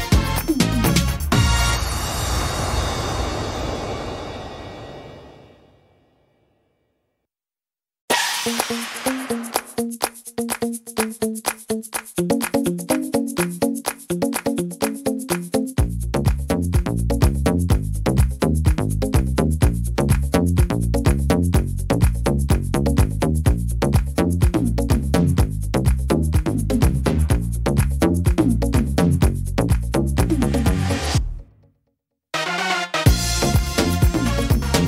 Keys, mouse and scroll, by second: 2.6 middle click, 3.5 s, 8.6 click, 10.5 middle click, 12.2 ctrl+r, 14.6 click, 15.5 right click, 16.2 ctrl+z, 17.3 ctrl+z, 18.9 s, 21.0 click, 22.8 ctrl+r, 24.5 s, 27.6 click, 31.8 middle click, 32.4 shift+middle click, 32.9-33.4 scroll up 2, 33.2 middle click, 33.9 ctrl+r.